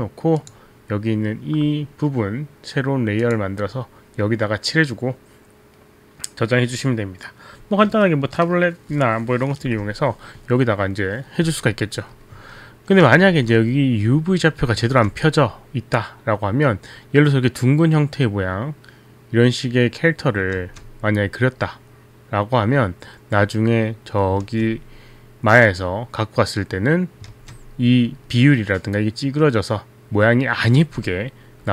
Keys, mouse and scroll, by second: 0.6 click, 3.3 click, 13.3 ctrl+z, 13.6 ctrl+z, 14.9 ctrl+z, 20.6 ctrl+z, 24.4 ctrl+z, 27.3 ctrl+z, 28.0 ctrl+z, 30.8 ctrl+z, 31.3 ctrl+z.